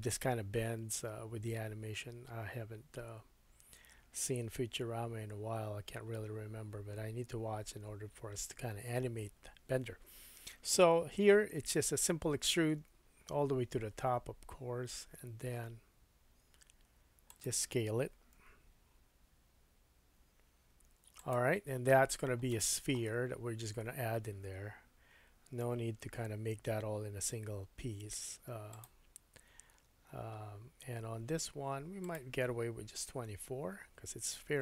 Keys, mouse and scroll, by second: 12.8 e, 17.4-33.3 drag, 18.4 s, 22.5 shift+middle click, 23.7 Tab, 26.0 shift+a, 29.6-30.1 scroll down 5, 31.2-32.0 scroll down 2, 32.0-33.3 middle drag, 32.0-33.3 right drag.